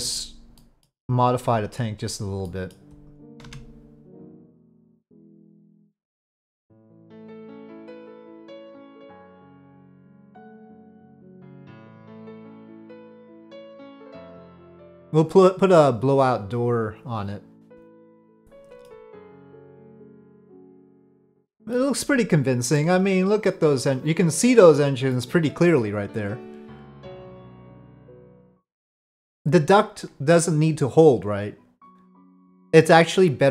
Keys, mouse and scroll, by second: 0.0 click, 0.6 middle click, 2.4 middle click, 3.0 click, 3.4 Tab, 4.3 click, 10.4 click, 11.0-13.9 middle drag, 18.2-18.9 middle drag, 19.9-21.7 middle drag, 22.7-24.7 middle drag, 25.1-29.4 middle drag.